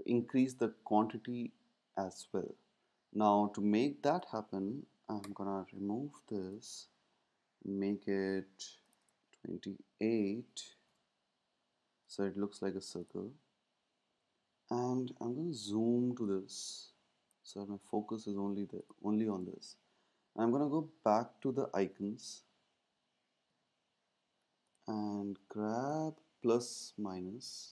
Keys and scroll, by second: 10.3-11.1 typing, 21.8 super+`.